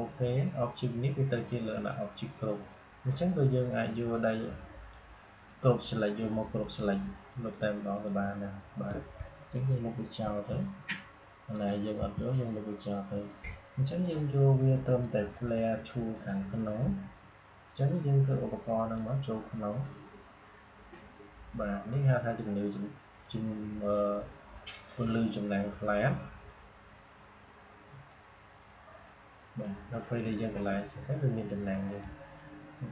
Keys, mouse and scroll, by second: 4.0-10.2 drag, 10.2 Delete, 11.4 click, 11.9 Delete, 14.9 click, 18.8-32.9 drag.